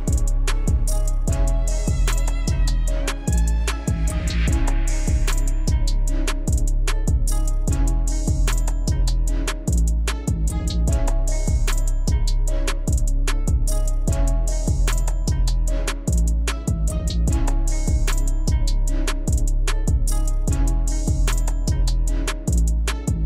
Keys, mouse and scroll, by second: 0.2 alt+scroll down 1, 1.1 alt+scroll up 1, 2.9 click, 8.1 click, 12.5 scroll down 1, 13.8 click, 19.6-20.4 alt+scroll up 2, 20.7 alt+scroll up 1, 22.1 alt+scroll down 1.